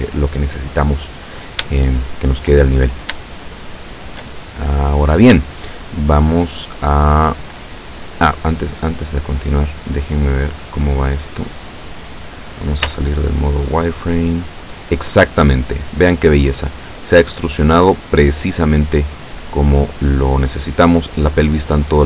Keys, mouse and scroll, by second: 1.8 shift+click, 2.8-3.2 shift+scroll down 1, 3.3-4.3 shift+drag, 4.6-5.0 shift+scroll up 1, 5.5-7.5 shift+drag, 8.1-9.7 drag, 9.8-10.3 scroll down 1, 10.5-12.9 drag, 12.9 z, 13.0 middle click, 13.7-20.8 middle drag, 21.0-22.0 middle drag.